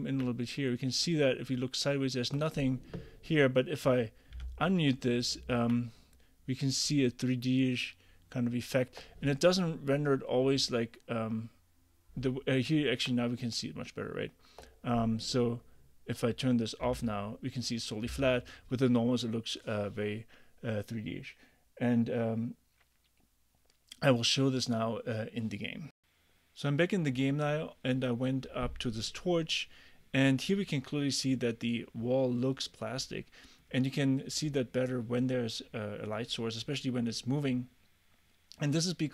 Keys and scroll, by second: 4.4 m, 16.9 m.